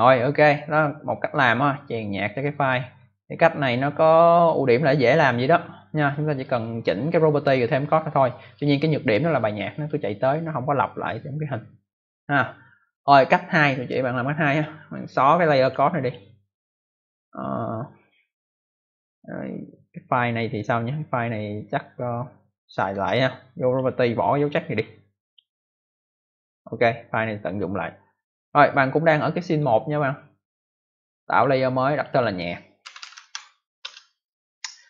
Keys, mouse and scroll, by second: 1.0 click, 6.3 click, 8.5 click, 15.5 click, 15.9 click, 16.0 double click, 22.7 right click, 23.6 click, 24.3 click, 25.2 click, 26.6 click, 28.6 click, 31.2 click, 31.8 click, 32.0 click, 32.5-33.6 typing, 33.7 Return.